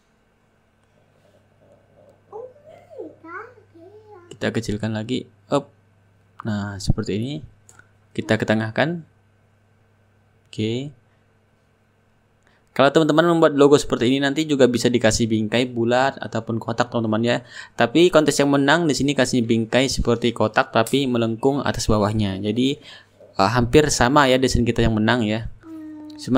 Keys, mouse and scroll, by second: 2.1-3.2 middle drag, 3.5-9.5 drag, 4.1 shift+right click, 9.0 right click, 9.8-12.0 drag, 10.8-12.0 right drag, 12.5 click, 15.0-16.2 middle drag, 16.3 ctrl+shift+g, 17.8 click, 19.5 click, 21.2 click, 22.3 ctrl+c, 23.0-26.1 drag, 25.8 ctrl+v, 26.3 Return.